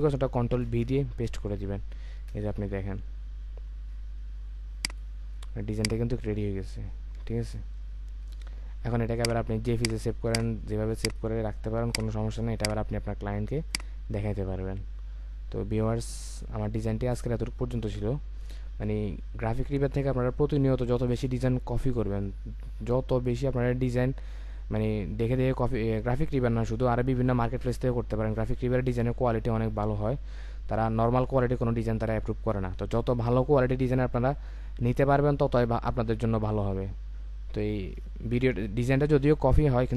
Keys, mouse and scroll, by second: 0.6 ctrl+v, 2.3 ctrl+0, 7.3-8.5 alt+scroll down 1, 8.5-11.6 alt+scroll up 1.